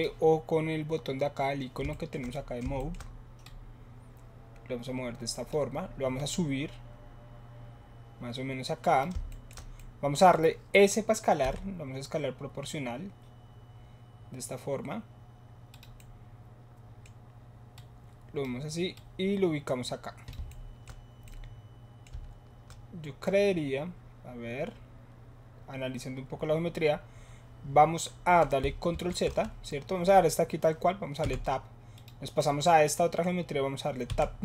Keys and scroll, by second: 11.4 s, 28.9 ctrl+z, 31.2 Tab, 34.1 Tab.